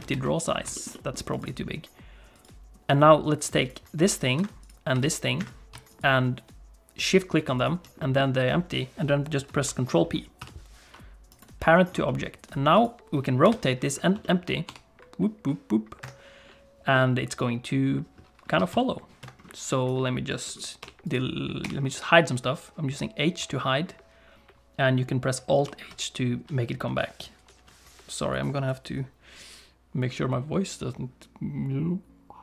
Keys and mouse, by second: 0.0 ctrl+space, 0.7 shift+middle click, 0.9 middle click, 1.3-2.4 right drag, 4.0 g, 4.6 click, 4.9 g, 5.9 shift+click, 7.5 shift+click, 8.0 middle click, 10.4 ctrl+p, 12.0 click, 13.4 KP_7, 14.2 middle click, 14.7 r, 16.9-17.9 middle drag, 18.5 r, 19.8 click, 20.8 h, 21.6 h, 25.6 alt+h.